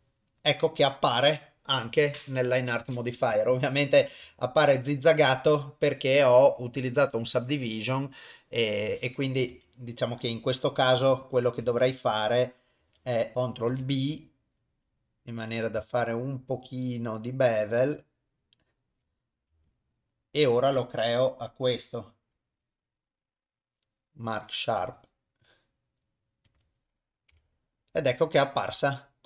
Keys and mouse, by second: 0.0 Tab, 3.3 click, 4.5 Tab, 5.5 Tab, 9.7 Tab, 12.2 ctrl+z, 13.1 ctrl+z, 13.3 shift+middle click, 13.9 ctrl+b, 20.0 alt+click, 23.1-26.8 right drag, 27.5 Tab, 28.0-29.2 middle drag.